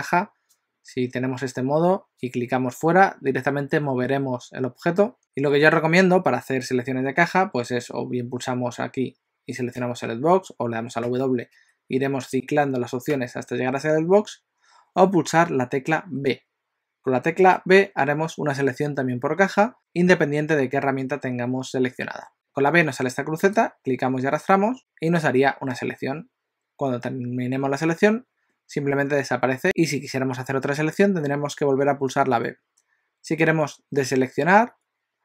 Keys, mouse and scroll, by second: 2.4 click, 5.2 click, 7.9 click, 11.2 w, 11.6 w, 12.3 w, 13.2 w, 17.5 b, 29.6 ctrl+z.